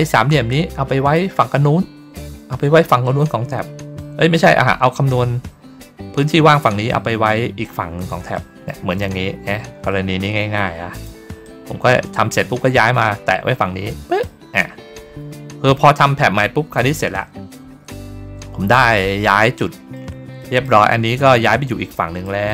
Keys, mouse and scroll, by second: 2.4 ctrl+scroll down 1, 3.0 ctrl+scroll down 1, 3.6-4.2 ctrl+scroll up 2, 8.2 middle click, 9.0 ctrl+scroll down 1, 10.8 click, 11.3-14.1 drag, 19.5 middle click, 21.8 middle click, 22.4 middle click.